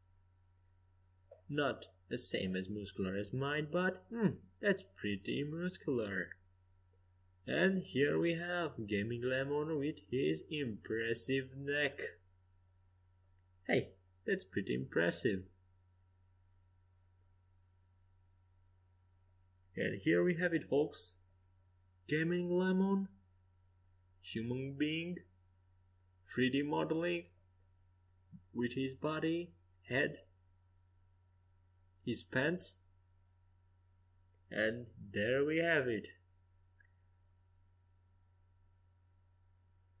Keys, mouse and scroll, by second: 0.5-5.5 right drag, 4.7 f, 5.5 middle click, 8.5 Tab, 11.9-14.2 middle drag, 14.7-17.7 middle drag, 17.9-19.0 middle drag, 20.8-23.0 drag, 23.0 middle click, 24.2 s, 25.5-27.4 drag, 26.5 middle click, 29.7-31.9 typing, 34.9 g, 39.5-40.0 drag.